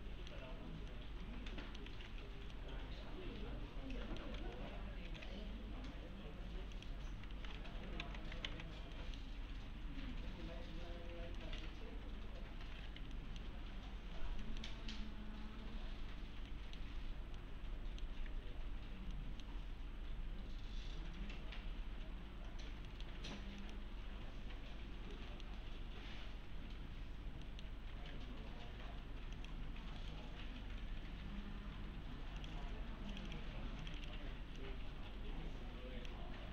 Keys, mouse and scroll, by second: 0.0-0.6 alt+middle click, 0.5 scroll up 1, 0.9-1.9 alt+middle click, 1.9 alt+x, 2.5-4.4 alt+middle click, 4.4 alt+x, 5.6 scroll up 1, 6.1-6.8 scroll down 1, 6.8 click, 7.1-8.1 typing, 7.8 scroll down 1, 8.5 alt+x, 9.0 middle click, 9.8-10.3 scroll up 1, 11.4 middle click, 11.8-12.6 scroll up 1, 12.6 scroll down 1, 12.9 F3, 13.1 middle click, 13.8 scroll up 1, 14.4 middle click, 16.5 middle click, 17.0-17.4 scroll down 1, 17.7-18.3 middle click, 18.1 F3, 18.8 scroll down 1, 19.1 middle click, 20.0 F3, 22.6 scroll down 1, 22.9 middle click, 23.6 click, 25.1 middle click, 27.4 middle click, 27.9 alt+1, 29.4 click, 30.0 right click, 31.1 2, 31.7 2, 32.2 2, 32.4 click, 36.4 1.